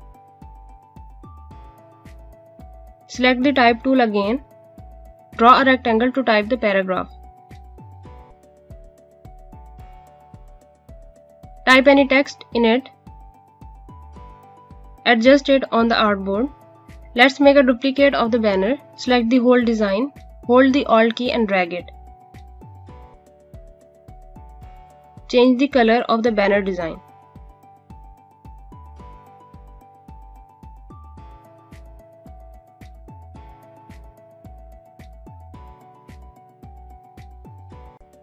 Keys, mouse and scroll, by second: 1.7 Delete, 2.7 right click, 4.6 click, 7.9 ctrl+z, 8.0 ctrl+z, 8.2 click, 8.8-13.5 typing, 12.7 click, 13.0 ctrl+c, 13.1 click, 13.7 ctrl+v, 14.0 click, 15.1 click, 16.5 click, 17.1 click, 18.0 scroll down 1, 18.1 scroll up 1, 18.2 click, 18.3 space, 18.4 click, 19.8 click, 28.5 click, 37.4 click.